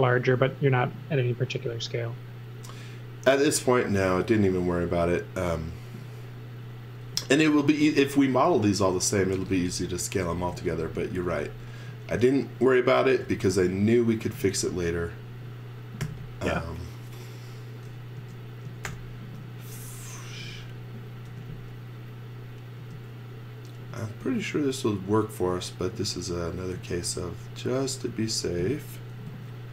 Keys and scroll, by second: 7.1 z, 8.2 x, 9.2-13.7 typing, 16.0 m, 18.8 shift+g, 21.2 m, 22.7 space, 23.8 m, 29.0-29.7 typing.